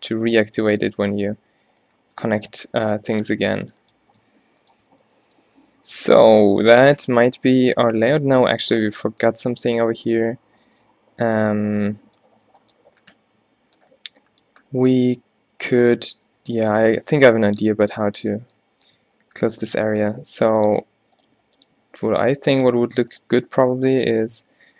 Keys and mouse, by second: 1.2 middle click, 1.6 g, 2.1 shift+Tab, 2.3 g, 2.9 g, 3.7 Tab, 4.2 Tab, 4.5 a, 5.0 a, 5.9 a, 6.3 a, 10.0 middle click, 11.5 middle click, 11.8 middle click, 14.3 middle click, 15.7-17.6 middle drag, 17.6 shift+e, 18.3 e, 20.2 g, 21.3 g, 22.0 e, 23.3 e, 24.4 g.